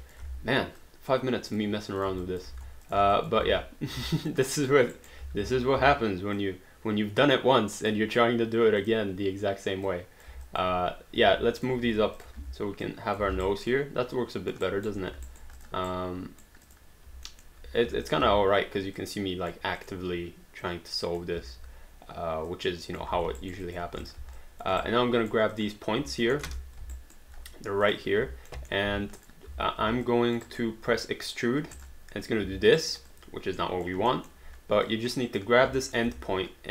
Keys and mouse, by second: 0.0 alt+click, 0.2 w, 0.8 click, 2.0 click, 2.3 alt+click, 2.5 q, 2.9 shift+click, 3.2 alt+click, 3.4 alt+w, 4.2 alt+click, 4.5 alt+right click, 5.2 w, 6.4 click, 8.8 click, 9.9 click, 10.5 alt+click, 11.6 click, 11.8 q, 12.2 shift+click, 12.4 w, 12.9 click, 13.3 alt+d, 13.5 alt+right click, 13.7 alt+click, 14.7 alt+right click, 15.3 alt+right click, 15.6 click, 15.9 right click, 16.7 click, 17.3 alt+middle click, 17.9 q, 18.1 click, 18.2 w, 19.0 click, 22.5 click, 23.2 alt+d, 23.4 alt+right click, 23.7 alt+click, 24.0 click, 24.4 alt+click, 24.8 right click, 25.5 click, 26.3 alt+middle click, 26.5 space, 26.9 alt+right click, 28.5 alt+middle click, 28.9 q, 29.2 click, 29.5 w, 30.1 alt+click, 30.5 alt+right click, 31.8 click, 32.8 alt+right click, 33.1 alt+click, 34.2 alt+middle click, 34.8 click, 35.9 alt+click, 36.1 w.